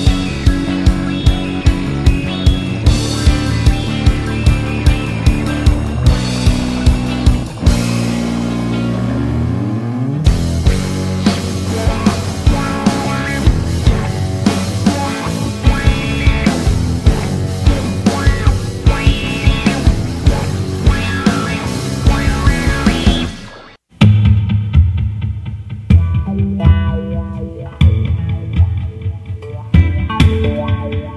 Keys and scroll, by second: 0.0-0.3 typing, 3.8 Left, 7.8 Left, 9.4 Right, 11.6 typing, 24.1 super+d, 27.6 super+d, 28.1 super+d.